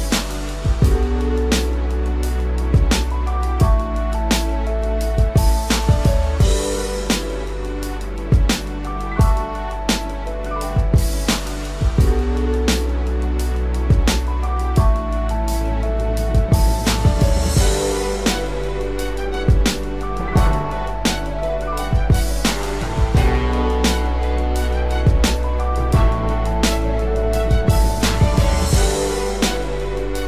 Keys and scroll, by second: 5.4 ctrl+=.